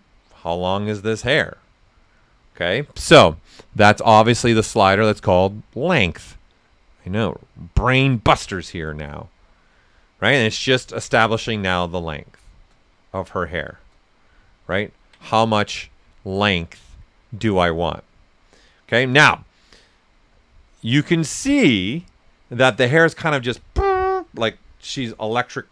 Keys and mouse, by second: 3.8-7.5 drag, 9.4 right click, 13.3 right click, 13.6 r, 17.6 click.